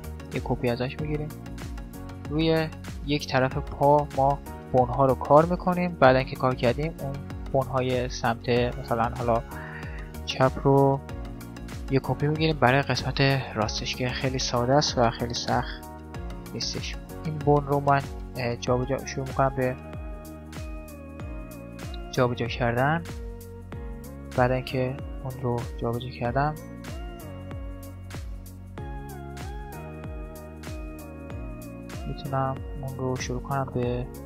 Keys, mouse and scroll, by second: 1.6-5.3 middle drag, 13.6-16.9 middle drag, 16.2 right click, 18.0 right click, 18.3-21.4 drag, 20.2 right click, 21.6 click, 22.1-23.3 middle drag, 23.1-24.9 right drag, 26.1-28.8 middle drag, 29.4 middle click, 30.2 right click, 31.1 middle click, 31.4 e, 32.0 right click, 33.0 e.